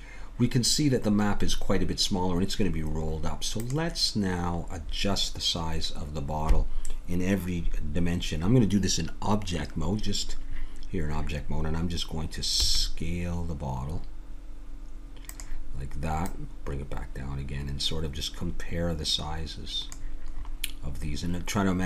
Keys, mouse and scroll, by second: 2.8-6.6 drag, 12.5 s, 16.3-18.0 drag, 20.3-21.8 middle drag.